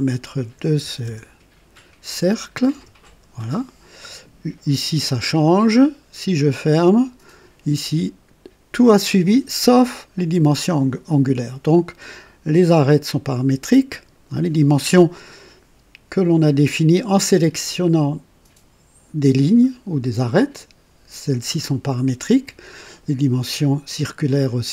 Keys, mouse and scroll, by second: 0.3 KP_7, 0.7 KP_0, 0.9 KP_0, 2.6 KP_Enter, 2.8 KP_Enter, 6.3 click.